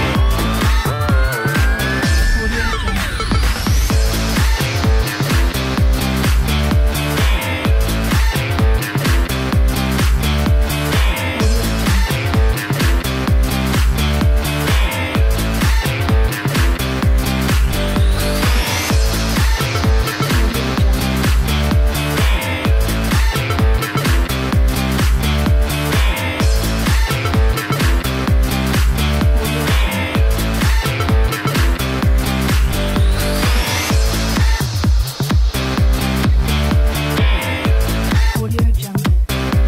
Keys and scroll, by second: 21.8-24.9 typing, 30.8-34.3 typing.